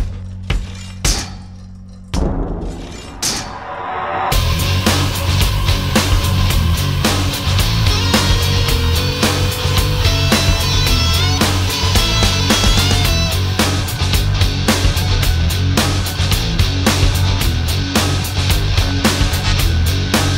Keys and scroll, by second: 3.5 ctrl+z, 15.8 space.